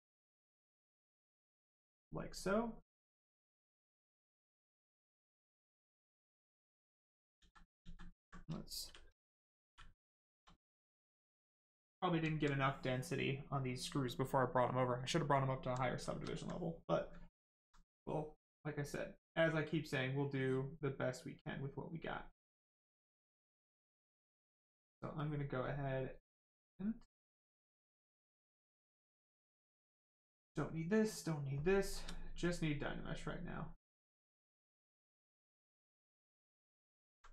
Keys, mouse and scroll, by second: 1.6 right click, 2.8 click, 6.1 click, 7.3 ctrl+z, 8.5 shift+z, 9.6 shift+f, 10.6 right click, 11.3 alt+right click, 12.1 alt+right click, 12.3 alt+right click, 13.2 right click, 13.3 right click, 15.4 alt+right click, 15.7 right click, 15.8 right click, 15.9 shift+right click, 16.2 alt+right click, 18.0 click, 18.1 click, 22.3 click, 25.1 click, 31.0 shift+click, 32.4 click, 36.6 alt+right click.